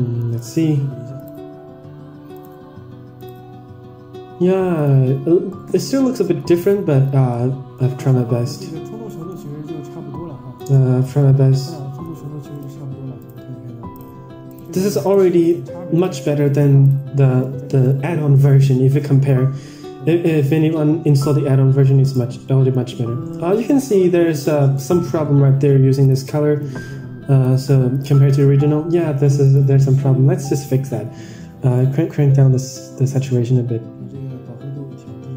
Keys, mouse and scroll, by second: 0.3 ctrl+shift+click, 1.3 ctrl+shift+click, 2.3 ctrl+shift+drag, 3.2 ctrl+shift+click, 4.8 ctrl+shift+click, 5.2 scroll down 4, 5.4 middle click, 5.8 middle click, 6.6 ctrl+shift+click, 7.2 middle click, 9.0-9.3 middle drag, 10.7 click, 11.1 middle click, 11.7 scroll up 3, 12.5 ctrl+shift+click, 13.2 ctrl+shift+click, 13.9 ctrl+shift+click, 14.5 ctrl+shift+click, 15.0 ctrl+shift+drag, 15.4 ctrl+shift+click, 16.8 ctrl+shift+click, 17.7 click, 22.3 middle click, 22.8-23.7 scroll up 3, 23.3 middle click, 24.6 middle click, 26.5 click, 27.9 ctrl+shift+click, 28.6 middle click, 29.5 ctrl+shift+click, 30.3 Tab, 31.7-35.3 shift+drag.